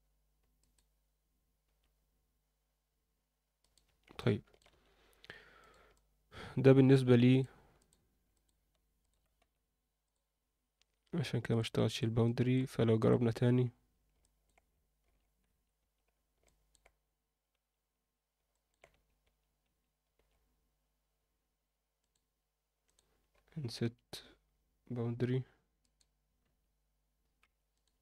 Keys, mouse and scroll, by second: 1.6 e, 3.8 Tab, 4.2 middle click, 5.6 Tab, 5.6 click, 5.9-6.9 middle drag, 7.3 click, 7.7 click, 8.3 shift+click, 9.0 shift+click, 9.4 x, 10.7 Tab, 11.5 click, 12.2 alt+middle drag, 12.6 Tab, 13.0 click, 14.2 middle click, 15.0 alt+h, 15.5 Tab, 15.8 Tab, 16.4 alt+middle click, 17.5 Tab, 18.5 alt+middle click, 18.9 Tab, 19.2 Tab, 19.6 Tab, 20.1 alt+a, 22.0 click, 22.8 click, 23.8 i, 25.9 click, 26.4 e, 27.7 click.